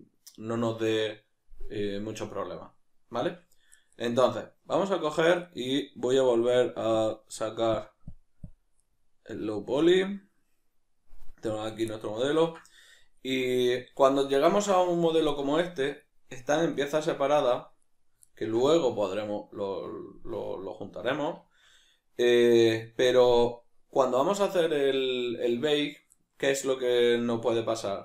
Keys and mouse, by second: 6.9-8.9 drag, 8.9-9.8 middle drag, 9.8 click, 11.5 right click, 11.9-16.3 middle drag, 16.3 right click, 16.7 right click, 17.0 right click, 17.4 right click, 18.2-22.8 ctrl+middle drag, 22.8 right click.